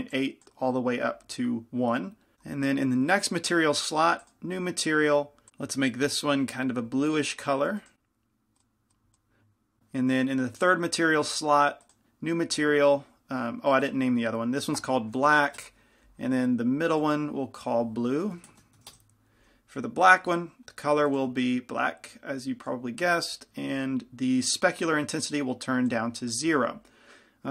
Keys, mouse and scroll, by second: 8.0 click, 10.8-27.5 drag.